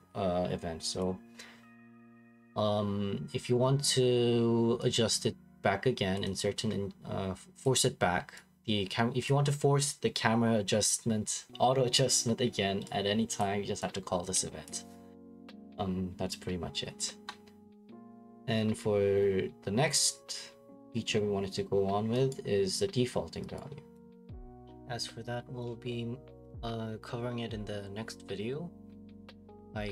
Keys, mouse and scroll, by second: 1.0 click, 6.1 click, 7.6 click, 9.2 click, 14.7 click, 20.9-22.3 scroll, 22.3 right click, 23.6 right click, 24.3 right click, 25.2 right click, 25.5 Escape, 25.7 Escape, 26.0 click, 26.5 click, 29.1-29.8 typing.